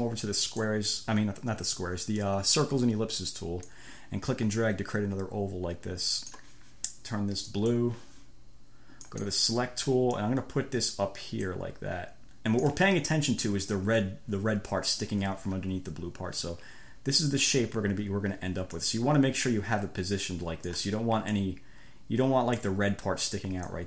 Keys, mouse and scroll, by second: 0.7 click, 3.9 click, 7.9 click, 9.3 click, 10.5-13.1 drag, 19.0-21.2 drag, 21.5-23.1 drag.